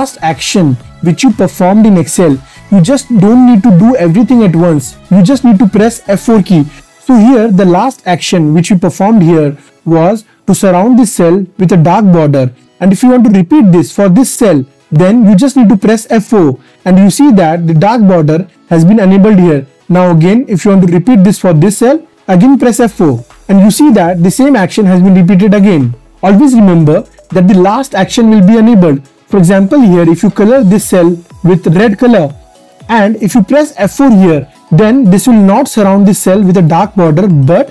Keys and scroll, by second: 4.7 F4, 15.6 F4, 22.1 F4, 32.9 F4.